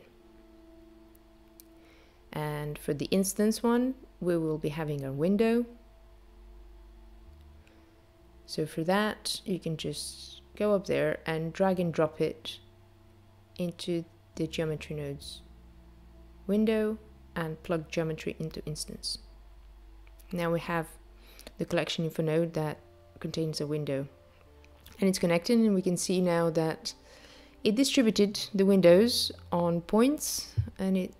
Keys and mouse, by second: 3.6 click, 11.6 click, 16.2 click, 20.5 click, 28.9 click.